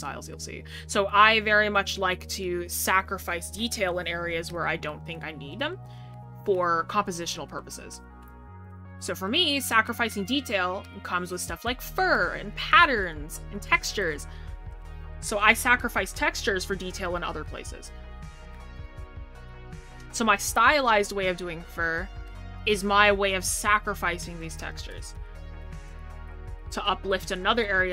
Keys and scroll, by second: 3.0 scroll down 1, 3.8 scroll up 1.